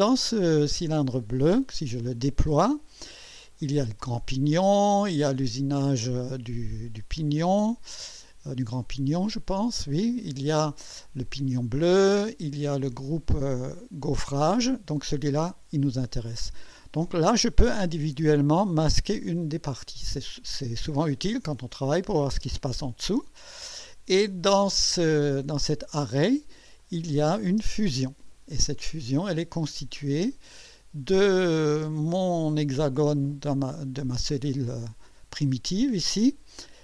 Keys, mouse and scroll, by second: 1.3 click, 5.4 click, 9.8 click, 11.9 click, 18.1 click, 18.8 space, 20.0 space, 21.5 scroll up 2, 22.3 space, 26.8 click, 27.5 space, 28.9-30.5 drag, 30.8-31.2 scroll up 1, 31.3-32.0 right drag, 32.3 scroll up 1, 34.6 scroll down 1, 35.1-36.5 drag.